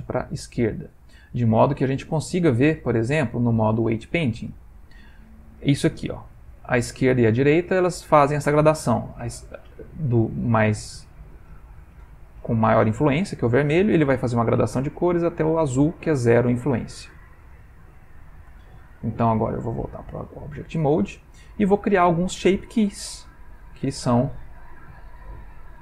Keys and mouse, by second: 0.3 click, 1.6 Tab, 2.7 ctrl+Tab, 6.3 click, 18.5 ctrl+Tab, 21.2 ctrl+middle click.